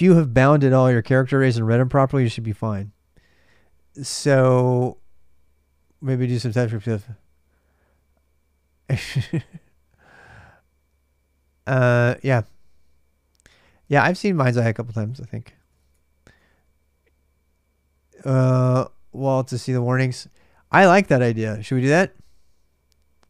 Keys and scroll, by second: 13.6 super+Tab, 14.3 super+Tab, 15.1-16.1 typing, 20.1-21.1 typing.